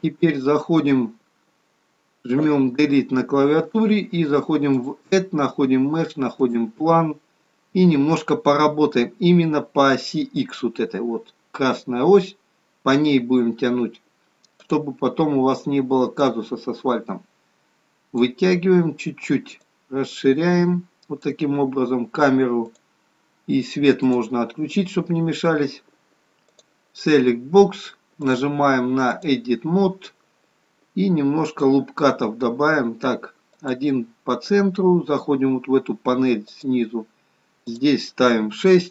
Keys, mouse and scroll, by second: 2.3 Delete, 4.7 click, 7.6-8.5 scroll up 1, 14.6 click, 16.2 click, 19.5 click, 24.0 click, 28.2 click, 31.4 click, 33.5 click, 36.7 click.